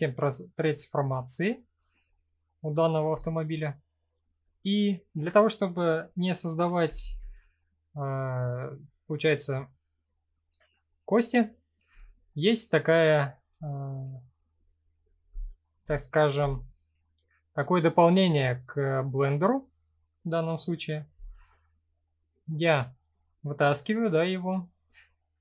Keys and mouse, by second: 0.6-1.5 middle drag, 2.1-2.4 middle drag, 2.8 click, 3.2 middle click, 6.6 shift+a, 11.9 middle click, 13.2 shift+middle click, 17.6-18.8 middle drag, 19.2 middle click, 20.7 n.